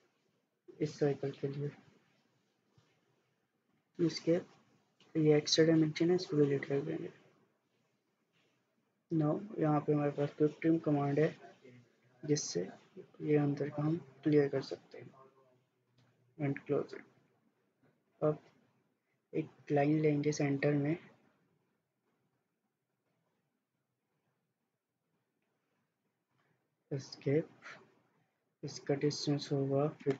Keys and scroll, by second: 3.2 Escape, 6.0 Delete, 26.5 Escape, 29.8-30.1 typing.